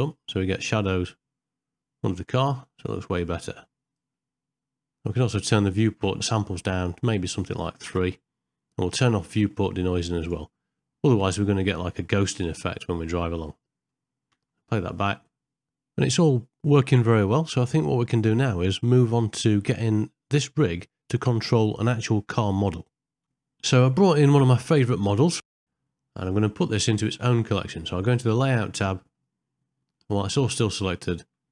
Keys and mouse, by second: 0.0-4.0 drag, 4.8 middle click, 5.5-7.9 drag, 10.2 click, 14.3 space, 15.0 click, 15.8 g, 28.8 middle click, 30.0 middle click, 30.9 shift+middle click.